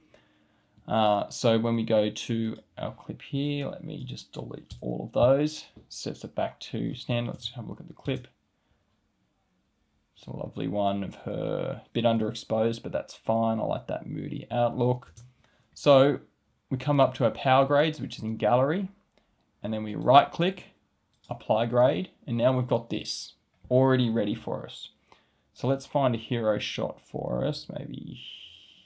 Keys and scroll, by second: 7.2 space, 15.0 space.